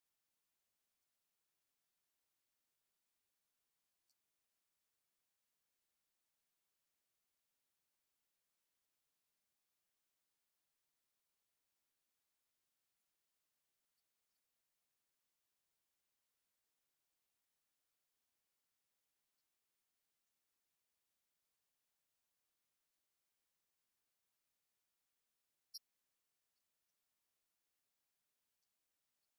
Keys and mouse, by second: 5.5-9.7 drag, 11.3-16.1 drag, 18.3-21.6 drag, 22.5-26.7 drag.